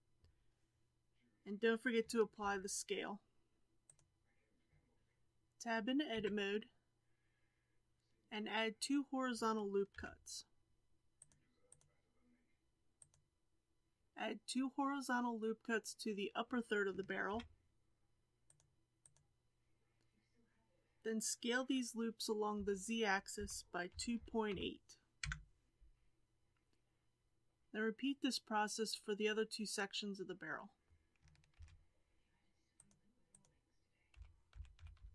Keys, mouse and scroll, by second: 2.4 ctrl+a, 6.1 Tab, 9.9 ctrl+r, 12.9 click, 14.0 2, 17.2 ctrl+r, 22.5 s, 31.5 ctrl+r, 34.1 s.